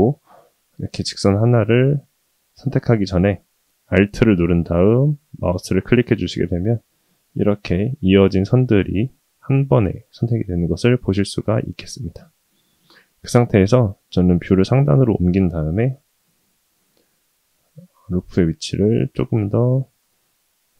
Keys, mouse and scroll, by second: 1.0 middle click, 5.2 alt+click, 6.2-8.2 middle drag, 8.5-10.0 middle drag, 10.4-11.0 middle drag, 13.5 KP_7, 16.4 g.